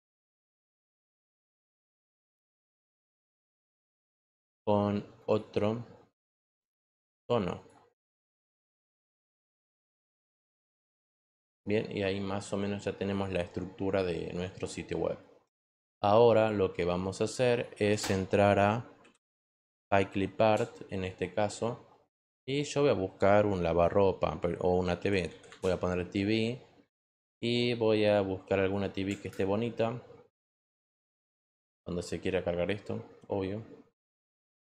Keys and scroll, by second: 18.7-19.9 typing, 20.4 Return, 24.9 t, 25.2 v, 25.5 Return.